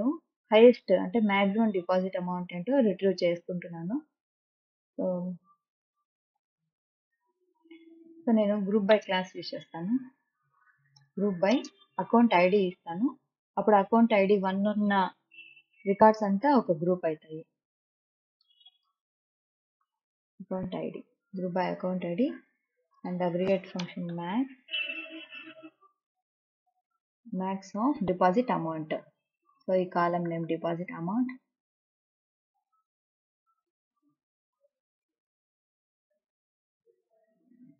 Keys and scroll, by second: 8.9 space, 9.4 g, 10.0 r, 11.0 Return, 11.5 space, 12.2 a, 12.6 c, 15.5 o, 15.8 u, 18.2-20.3 typing, 23.8-26.8 typing, 27.5 Left, 31.3 d, 31.6 e, 32.3 o, 33.3-36.4 typing.